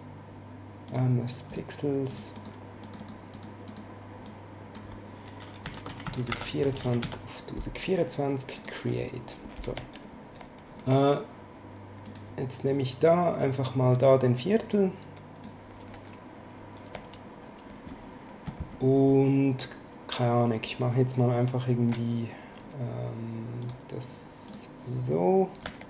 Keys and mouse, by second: 0.9 click, 5.6-7.0 typing, 6.3 Tab, 8.6 click, 12.1 click, 13.4 click, 23.6 click.